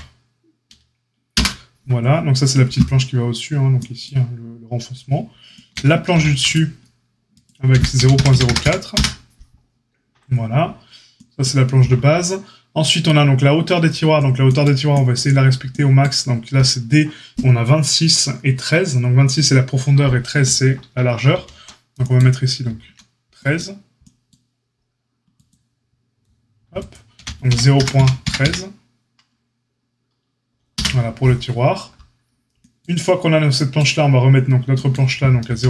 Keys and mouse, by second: 6.1 ctrl+r, 7.7 g, 22.6 ctrl+r, 27.1 g, 35.4 ctrl+r.